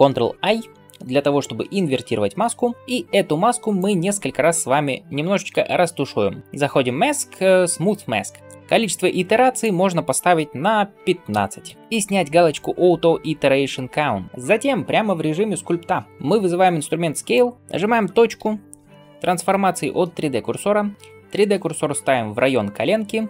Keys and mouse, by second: 0.4 ctrl+i, 11.8-23.2 right drag, 17.3-23.2 drag, 17.3-23.2 middle drag.